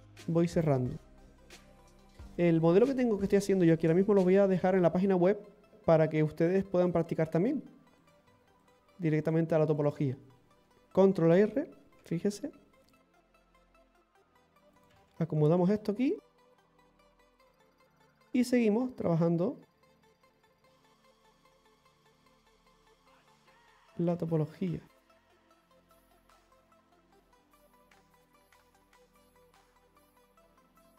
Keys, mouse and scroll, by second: 0.5 right click, 1.7 f, 2.1 click, 2.1 scroll, 2.3 right click, 2.6 alt+shift+right click, 2.8 alt+shift+right click, 4.2 x, 5.7-6.2 scroll up 3, 6.9 click, 8.0 right click, 8.6 shift+right click, 9.3 shift+right click, 9.8 shift+right click, 10.7 scroll up 2, 12.0 ctrl+r, 14.7 right click, 14.7 g, 14.8 right click, 17.7 middle click, 18.3 scroll up 1, 19.1 click, 23.1 middle click, 24.5 click.